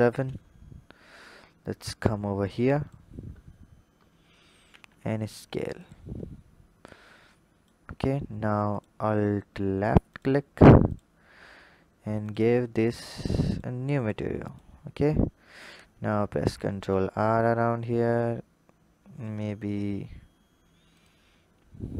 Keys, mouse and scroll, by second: 1.0-3.3 drag, 3.3-4.5 scroll up 8, 4.5 s, 7.0-7.8 drag, 7.8-8.4 scroll up 2, 8.6 alt+click, 10.0 click, 10.8 alt+click, 12.1-16.2 drag, 16.2 ctrl+r.